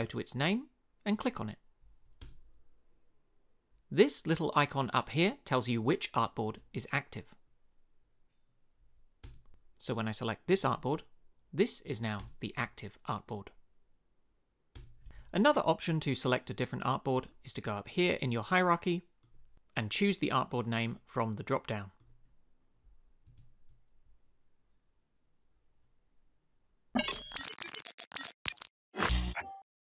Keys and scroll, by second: 2.2 space, 9.2 space, 12.2 space, 14.7 space, 23.3 space.